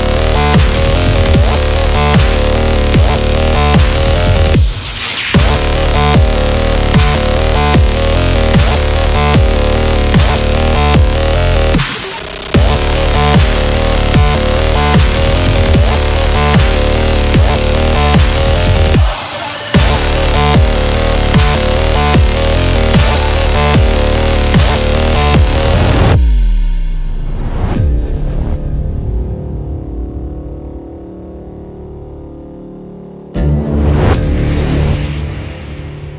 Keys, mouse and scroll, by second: 0.0 right click, 0.9 click, 2.9 Return, 3.3 Down, 4.2 Left, 6.1 scroll down 1, 6.3-7.8 typing, 6.5 click, 7.1 scroll down 1, 7.4 scroll up 1, 7.7 click, 8.1 scroll up 1, 8.3 scroll down 1, 9.6 click, 10.2 ctrl+b, 11.5-14.2 drag, 14.9 scroll up 1, 15.1 scroll down 1, 16.5-25.2 drag, 25.7-33.0 drag, 33.0 ctrl+t, 33.6 right click, 33.8 right click, 34.5-36.1 drag.